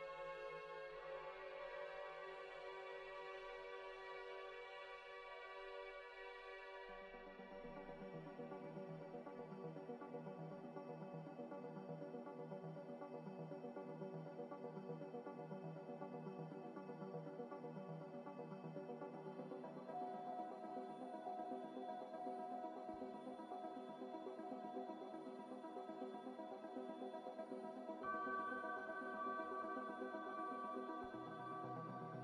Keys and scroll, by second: 5.0 a, 12.4 F9, 13.1 z, 14.4 z, 21.3 Return, 25.3 a, 27.2 z, 28.1 Delete, 29.5 Delete, 29.9 Delete, 30.4 Delete.